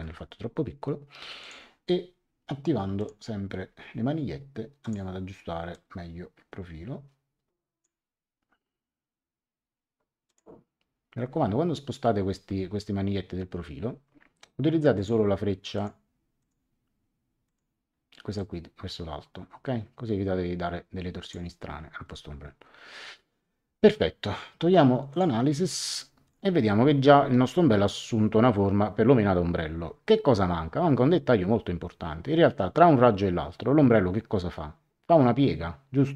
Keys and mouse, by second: 1.4 click, 3.0 click, 4.8 click, 10.2 click, 14.9 click, 17.4 click, 25.1 click, 26.2 click.